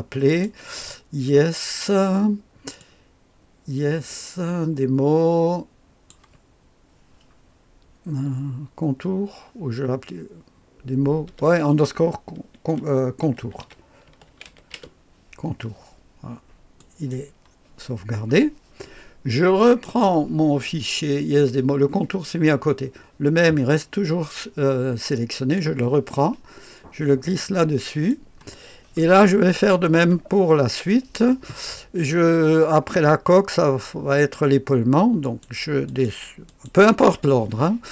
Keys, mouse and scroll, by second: 19.6 click, 30.1-37.9 middle drag.